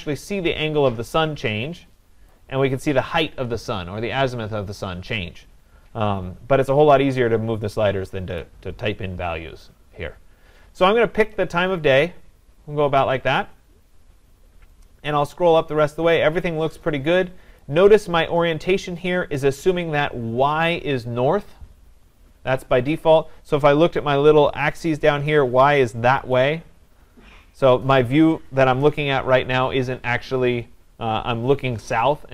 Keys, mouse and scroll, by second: 2.3-7.4 drag, 8.4-11.4 drag, 13.0 click, 17.6 click.